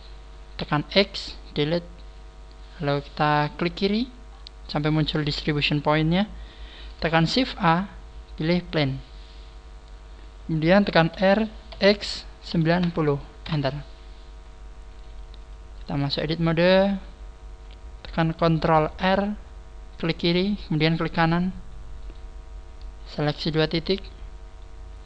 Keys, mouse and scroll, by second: 1.3 x, 3.6 click, 4.3-5.1 scroll up 6, 7.3 shift+a, 8.7 shift+a, 15.4 click, 16.3 click, 20.9 right click, 22.0 right click, 23.1 shift+right click.